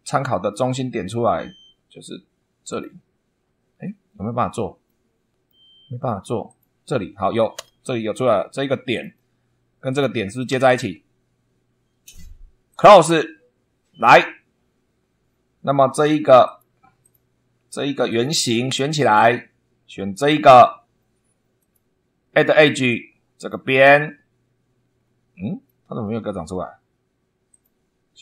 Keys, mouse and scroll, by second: 2.6 click, 3.7 scroll up 2, 4.8 middle click, 4.9 right click, 5.4 middle click, 6.4 click, 7.5 Escape, 8.8 click, 9.8 click, 10.4 c, 12.6 click, 13.4 scroll down 2, 13.6 scroll up 2, 15.0 scroll up 2, 16.4 click, 17.0 click, 18.0 click, 20.1 click, 21.5 click, 22.2 scroll down 1, 23.3 click, 24.9 scroll down 1, 25.6 shift+middle click, 27.4 click.